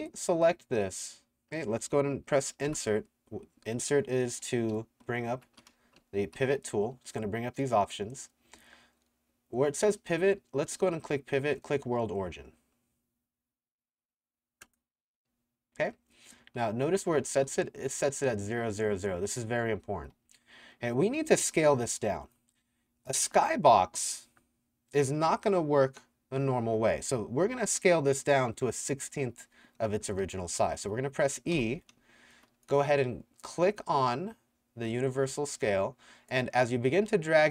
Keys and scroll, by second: 2.7 Insert, 4.4-6.0 typing, 16.1-17.4 typing, 19.9-22.0 typing, 29.3-32.6 typing.